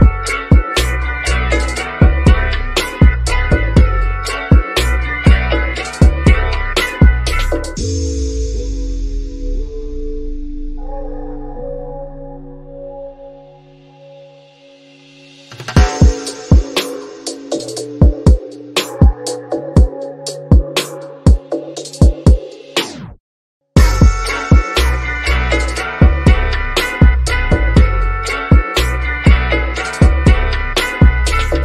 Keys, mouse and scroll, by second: 1.7 scroll up 1, 1.7 click, 2.6-2.9 scroll up 1, 3.9 click, 6.9-7.3 scroll down 1, 7.9-10.1 shift+middle drag, 10.1-12.5 shift+middle drag, 13.9 shift+click, 14.7 scroll up 1, 16.4 click, 18.9 click, 20.2 scroll down 1, 21.1-23.1 middle drag, 23.1 shift+middle click, 24.2 scroll up 1, 24.7-26.8 shift+middle drag, 26.8 click, 31.3 2.